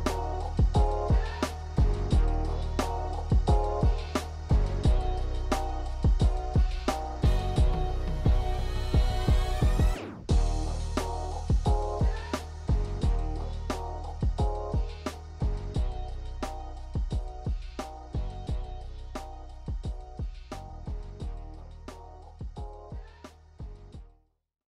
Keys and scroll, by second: 1.9 KP_9, 4.4 KP_9.